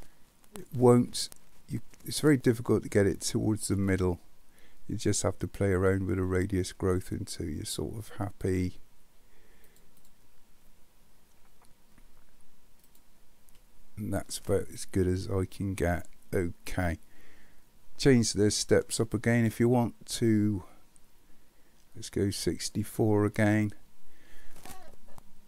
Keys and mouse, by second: 5.1-8.6 drag, 9.8 click, 12.9 click, 15.0-16.7 middle drag, 19.4-22.7 drag.